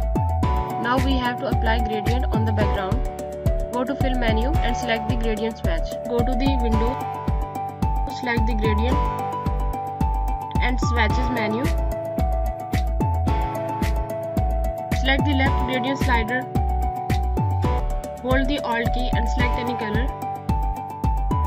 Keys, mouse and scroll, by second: 1.0 space, 2.8 click, 15.9 click, 19.7 alt+Num_Lock.